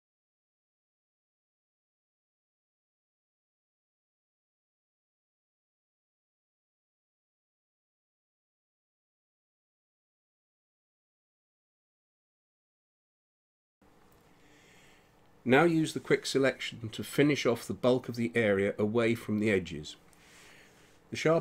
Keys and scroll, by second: 0.9 space, 4.5 space, 5.4 [, 8.1 space, 11.2 space, 13.5 space, 18.3 x.